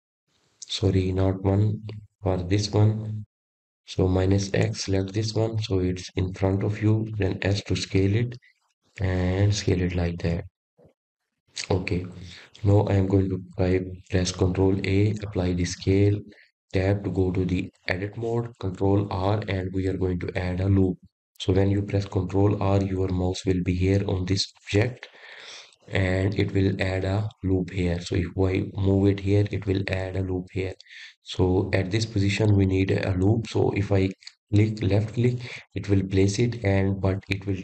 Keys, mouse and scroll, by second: 0.2 g, 2.9 KP_1, 4.9 scroll down 2, 5.5-8.5 middle drag, 8.5 click, 9.4-10.1 scroll up 4, 11.1 s, 13.1-13.9 scroll up 6, 13.9 scroll down 1, 15.0-15.7 shift+middle drag, 15.7-16.4 scroll up 4, 16.4-17.1 scroll down 1, 18.5 ctrl+a, 20.7 Tab, 23.5 ctrl+r.